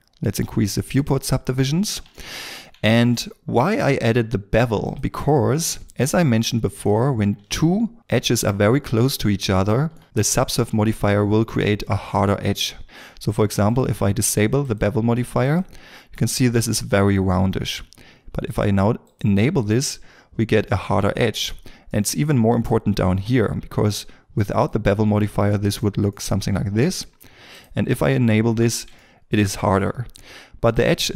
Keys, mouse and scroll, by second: 2.1 shift+middle click, 2.8 ctrl+middle click, 7.6 ctrl+middle click, 9.6 shift+m, 19.3 double click, 21.2 scroll down 1, 21.8 middle click, 22.4 scroll up 1, 25.1 middle click, 28.2 shift+middle click, 28.9 ctrl+middle click.